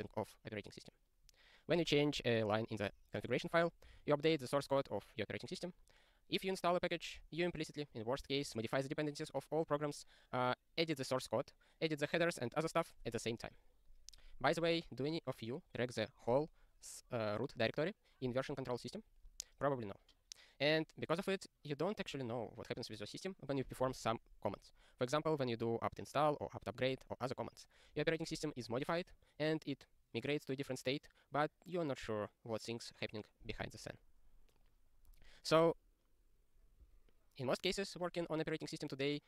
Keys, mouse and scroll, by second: 36.1 scroll down 1.